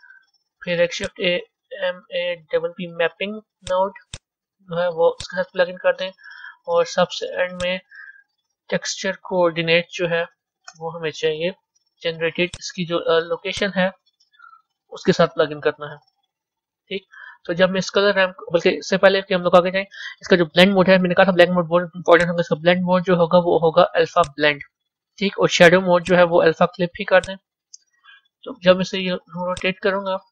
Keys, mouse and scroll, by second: 1.2 shift+a, 5.8 click, 7.8 shift+a, 12.8 o, 16.1 click, 18.2-24.2 middle drag, 24.2-29.4 drag, 29.4-30.3 drag.